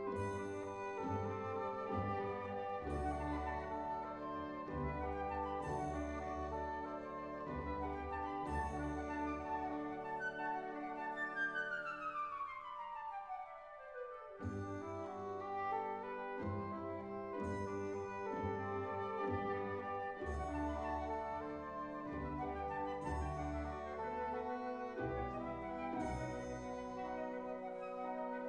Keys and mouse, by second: 0.7 click, 1.7-3.0 drag, 3.6 e, 4.5 click, 5.6-7.8 drag, 9.0 i, 10.3 click, 12.3 click, 16.1 ctrl+r, 17.5 KP_Enter, 18.6 ctrl+r, 20.1 KP_Enter, 22.6 1, 23.3 click, 24.2 shift+click, 25.1 shift+click, 25.2 shift+click, 26.3 shift+click, 27.0 shift+drag, 27.6 shift+drag, 28.3 shift+click.